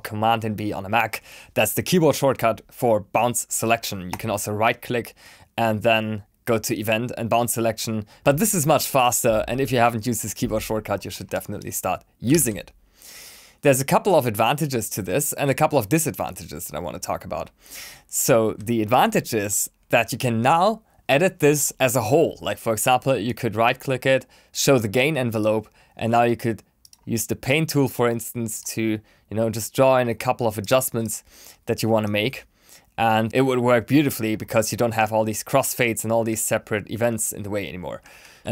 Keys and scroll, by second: 11.9 super+b.